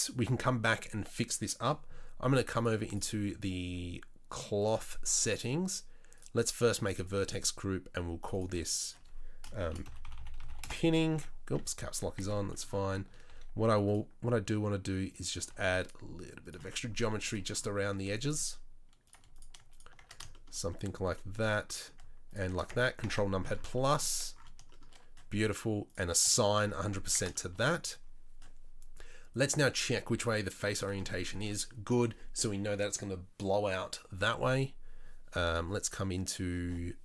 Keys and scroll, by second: 10.1 n, 11.1 Tab, 11.6 Tab, 12.2 Tab, 13.3 ctrl+r, 15.5 ctrl+r, 18.0 ctrl+r, 27.0 Tab.